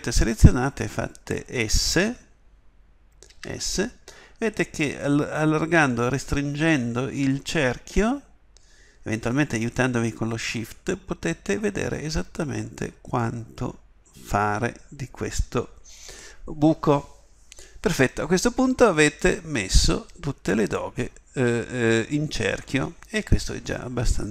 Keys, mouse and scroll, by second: 3.3 s, 18.2-22.2 middle drag.